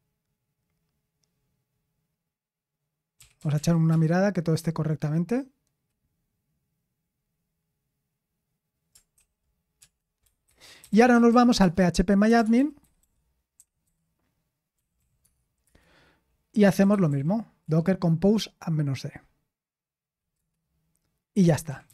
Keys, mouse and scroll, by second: 10.5-18.1 typing, 15.6 Return.